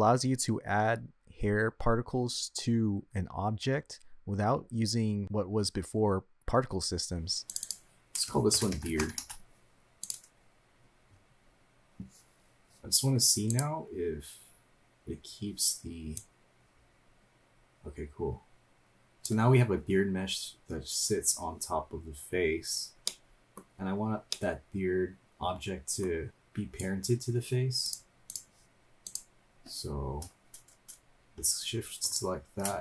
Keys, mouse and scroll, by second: 1.5 p, 7.5 click, 7.6-10.1 drag, 10.8-14.3 scroll up 5, 14.3 click, 16.2-19.2 drag, 21.8 scroll up 2, 22.3 scroll down 1, 23.1 middle click, 24.3-26.0 middle drag, 26.3-26.8 scroll down 2, 27.8-28.4 drag, 29.0 click, 32.0 shift+click.